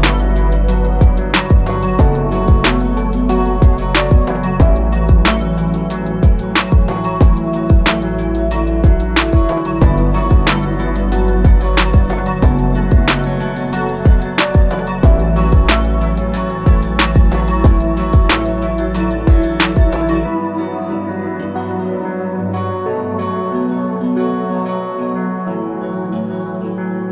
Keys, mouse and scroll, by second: 0.8-1.1 scroll up 3, 1.2 alt+middle click, 1.8 alt+middle click, 2.2-2.7 scroll down 2, 2.8 alt+middle click, 3.1 scroll down 2, 3.4-3.8 alt+drag, 4.0 alt+middle click, 4.3 scroll up 2, 4.6 alt+middle click, 4.9 scroll down 2, 5.2 alt+middle click, 6.5 click, 7.4 scroll down 1, 7.9 click, 8.8 click, 9.6 click, 10.6 click, 11.8 click, 14.5-14.8 scroll up 2, 14.9 alt+middle click, 15.2 alt+click, 15.9 alt+click, 16.6-19.1 alt+drag, 19.4 alt+middle click, 19.4 alt+scroll down 1, 19.7 alt+click, 20.4 alt+middle click, 20.7 alt+middle click, 20.7 scroll down 1, 21.0 alt+middle click, 22.3 click, 23.4 click, 24.0 click, 25.2-27.1 drag.